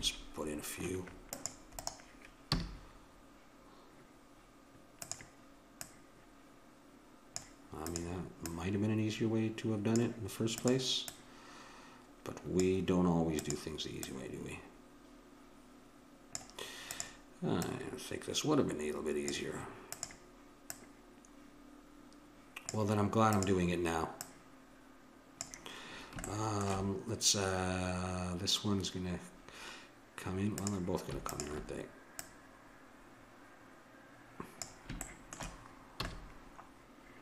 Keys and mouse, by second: 2.5 a, 5.0-7.7 drag, 7.8-10.3 drag, 10.6-12.9 drag, 13.4-15.8 drag, 16.9-19.5 drag, 20.0-22.5 drag, 23.3-26.0 drag, 26.3-28.2 middle drag, 30.6-33.9 drag, 35.0 middle click, 36.0 a.